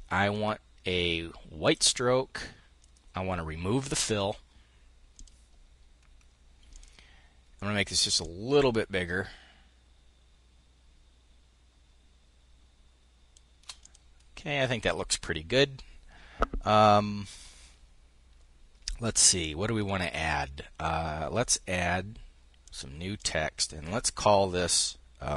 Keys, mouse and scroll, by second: 1.2-2.3 drag, 2.4 click, 3.4 click, 4.7-5.8 drag, 6.3-7.6 drag, 7.8-13.6 ctrl+shift+drag, 19.4 click, 22.2 click.